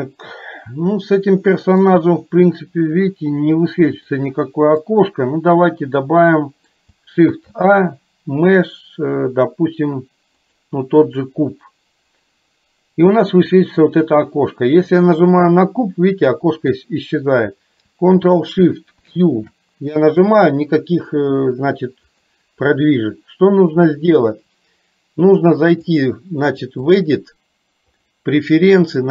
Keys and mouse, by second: 4.2 middle click, 5.7-6.8 middle drag, 14.9 click, 21.2 click, 26.0 click, 26.9-29.1 drag.